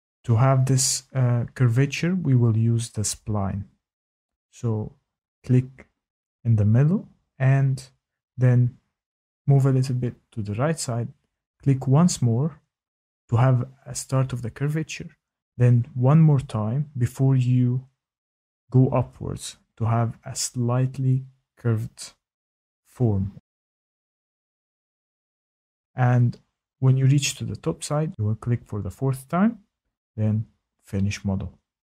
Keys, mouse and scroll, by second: 3.8 click, 7.7 click, 12.9 click, 18.8 click, 25.5 click, 26.1-27.2 scroll, 27.2-28.8 scroll, 29.6 Escape, 29.6 click.